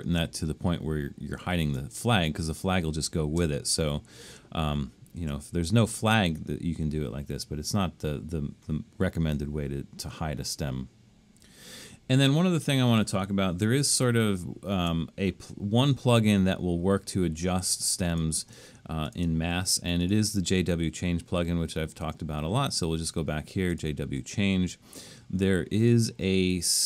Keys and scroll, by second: 5.2 super+z, 13.8 super+-, 14.8 super+-.